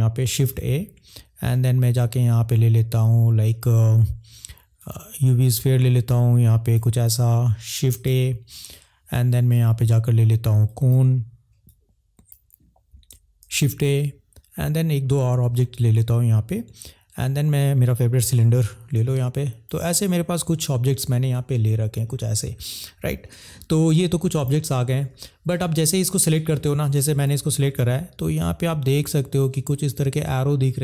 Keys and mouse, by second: 0.4 shift+a, 6.9 click, 8.1 shift+a, 11.7 click, 13.4 shift+a, 19.0 click.